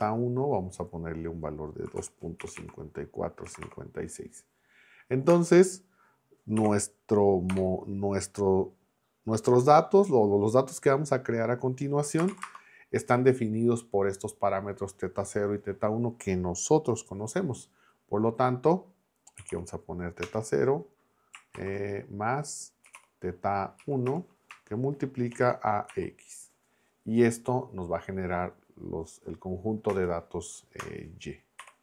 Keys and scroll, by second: 1.6-4.1 typing, 5.3 Return, 6.6 u, 7.5 BackSpace, 12.2 space, 12.3 =, 12.4 space, 19.1-20.0 typing, 20.2 Return, 22.6-23.4 typing, 23.8 Down, 24.1 Return, 25.3 shift+8, 25.9 x, 29.9 Return, 31.6 y.